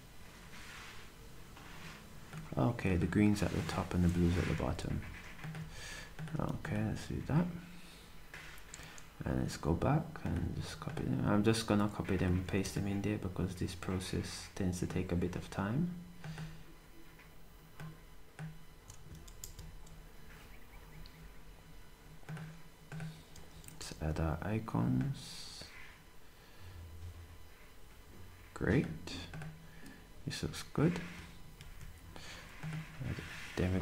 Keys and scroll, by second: 4.0 d, 8.0 typing.